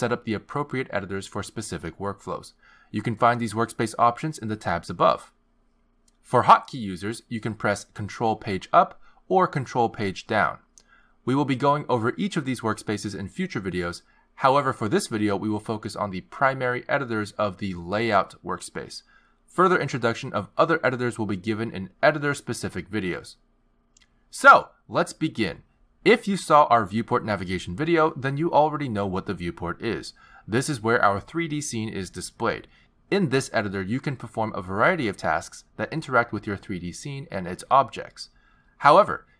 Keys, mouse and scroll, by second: 10.2 ctrl+Page_Down, 10.2 click, 11.7 ctrl+Page_Down, 11.7 ctrl+Page_Up, 33.5 click, 34.9 click, 36.0 click, 36.8 click.